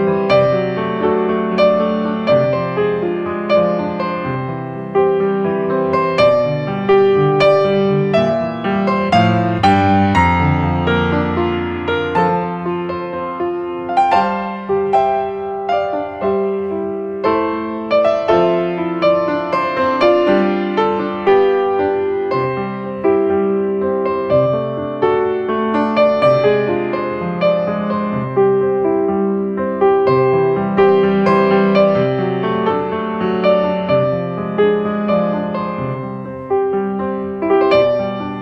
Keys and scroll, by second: 6.5 space, 19.5 ctrl+space, 28.0 space, 28.8 space, 35.0 ctrl+space, 38.3 space.